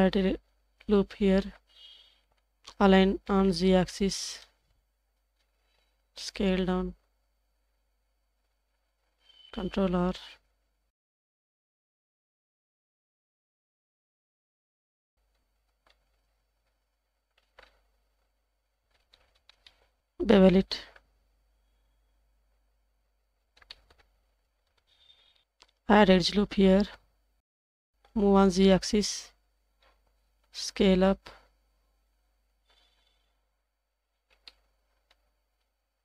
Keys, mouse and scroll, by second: 2.8 s, 9.5 ctrl+r, 13.1 g, 15.7 shift+b, 17.0 g, 18.9-19.5 scroll down 2, 19.5 scroll up 2, 19.6 scroll down 1, 19.6-20.0 middle drag, 20.0 alt+z, 23.3 scroll down 1, 23.7 shift+middle click, 25.4 shift+middle click, 25.4 ctrl+z, 28.0 g, 29.8 scroll up 2, 30.2 s, 32.5 g, 34.2 scroll down 3, 34.5-35.1 middle drag, 35.7 s.